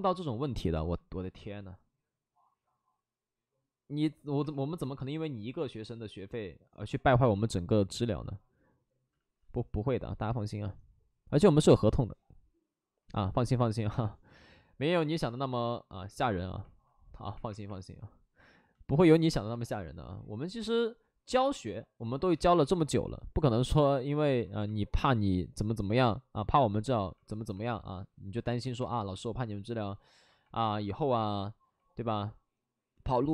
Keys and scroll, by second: 4.5-5.2 typing, 7.1 2, 9.1 ctrl+z, 11.3 ctrl+z, 13.0 ctrl+z, 13.8 2, 17.1 2, 19.4 w, 22.3 2, 22.4 2, 24.0 2, 28.5 w, 31.8 alt+s, 32.0 alt+s.